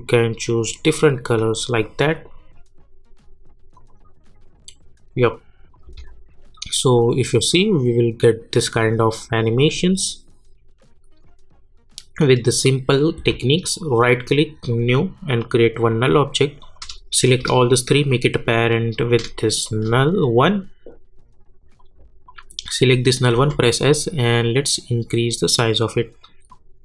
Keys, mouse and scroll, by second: 3.7 click, 5.3 click, 5.8 space, 7.4 -, 13.2 space, 13.6 click, 13.9 right click, 14.7 click, 17.3 shift+click, 18.1 click, 19.6 shift+click, 20.4-22.3 drag, 23.3 s, 23.8-26.8 drag.